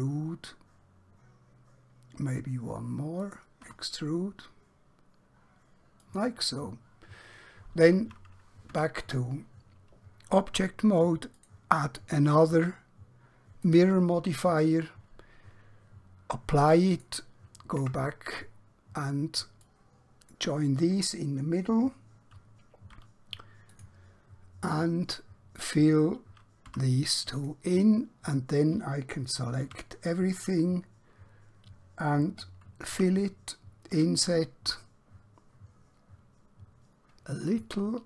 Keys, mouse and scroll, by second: 3.3 click, 3.7 e, 6.1 click, 8.8 Tab, 11.4 click, 16.9 click, 17.9 Tab, 19.6 click, 23.0 q, 23.7 click, 26.6 f, 27.3 click, 29.7 a, 32.9 f, 36.3 typing, 37.4 click.